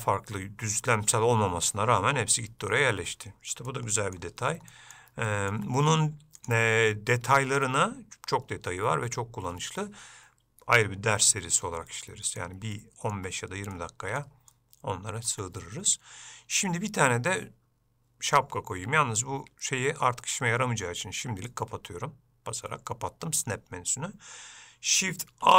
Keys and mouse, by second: 3.9 middle click, 4.9 middle click, 5.5 shift+middle click, 6.6-8.4 drag, 12.3 middle click, 13.0 shift+click, 13.9 middle click, 14.7 shift+click, 15.4 shift+middle click.